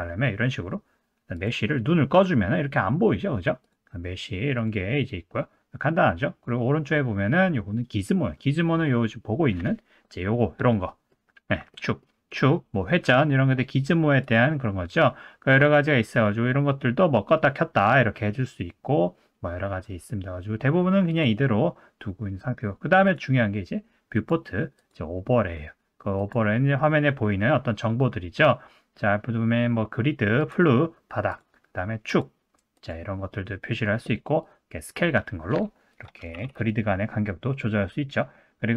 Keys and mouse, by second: 3.8-6.1 drag, 10.7-11.1 middle drag, 11.7 middle drag, 14.3-19.6 drag, 21.3-23.0 drag, 24.2 click, 26.2-38.7 drag.